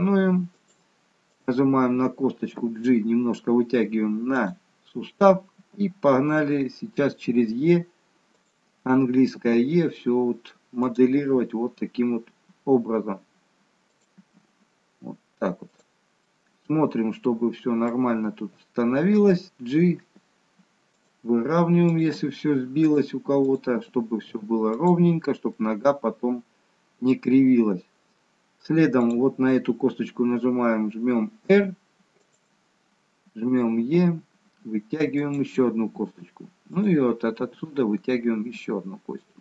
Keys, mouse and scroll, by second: 1.2 click, 2.5 g, 9.3 e, 11.2 e, 14.2 e, 16.3 middle click, 18.6 click, 20.1 g, 21.8 click, 22.2 g, 23.5 click, 23.8 g, 25.6 middle click, 29.0 click, 31.5 r, 33.9 e, 36.6 click, 37.3 e.